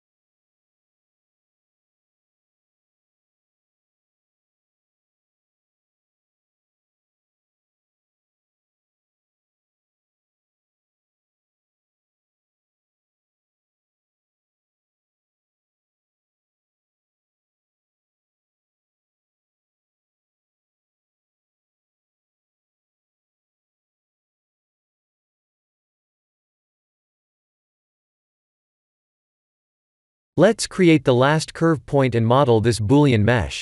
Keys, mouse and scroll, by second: 1.0 shift+click, 1.5 shift+middle click, 2.4 shift+click, 3.4 shift+click, 3.9 shift+middle click, 5.0 shift+click, 6.2 shift+click, 6.6 shift+middle click, 7.8 shift+click, 8.8 shift+click, 9.3 shift+middle click, 10.5 shift+click, 11.7 shift+click, 13.1 v, 13.8 Tab, 14.3-14.8 scroll down 5, 15.6 scroll down 4, 15.8 shift+middle click, 17.0 shift+middle click, 17.3-17.9 scroll up 5, 18.2 shift+middle click, 18.6-19.0 scroll up 3, 19.3 shift+middle click, 19.6 shift+middle click, 19.9 Tab, 24.2 Tab, 24.7-25.9 scroll down 15, 27.6 shift+middle click, 28.5 shift+middle click, 29.1-29.7 scroll up 7, 30.2 click, 31.0 shift+a.